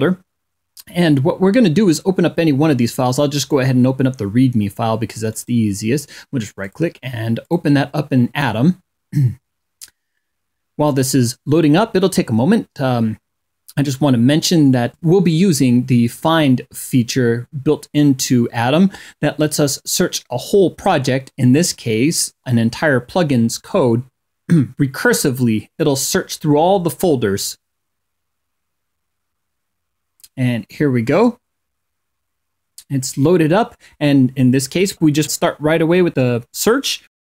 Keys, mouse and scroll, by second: 5.1 right click, 6.4 click, 7.2 click.